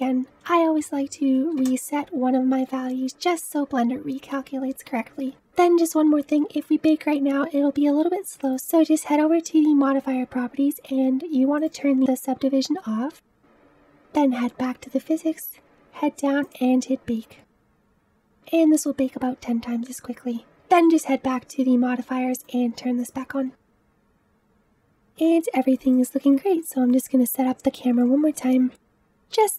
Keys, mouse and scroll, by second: 11.6 click, 22.5 click, 23.3 click, 24.3-24.9 drag, 25.4-26.5 middle drag, 26.5 shift+scroll up 2, 27.2-28.6 shift+middle drag, 28.6 g.